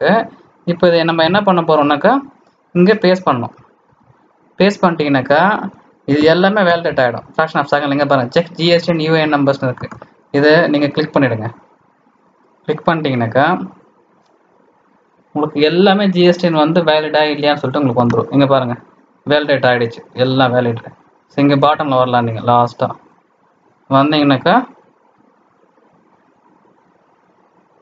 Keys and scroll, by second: 1.2 alt+Tab, 1.5 alt+Tab, 3.8 ctrl+v.